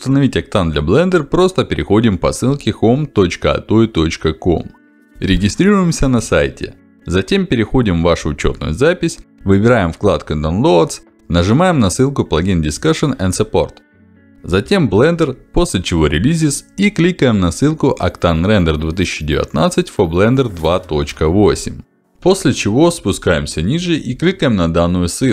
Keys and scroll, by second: 10.2 ctrl+alt+d, 14.6 ctrl+alt+d, 24.4 ctrl+alt+d.